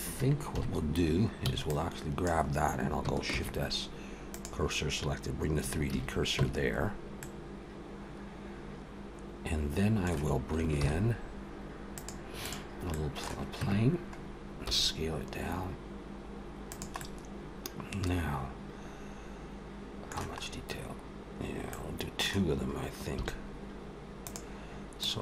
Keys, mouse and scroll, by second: 0.4 KP_1, 1.3 b, 3.2 shift+s, 5.7 alt+a, 6.2 Tab, 7.0 middle click, 10.7 shift+a, 12.7 middle click, 13.4 Tab, 14.0-14.5 scroll down 3, 14.5 s, 16.8 middle click, 20.3-21.1 scroll up 1, 21.4 middle click, 23.0 s, 24.8 click.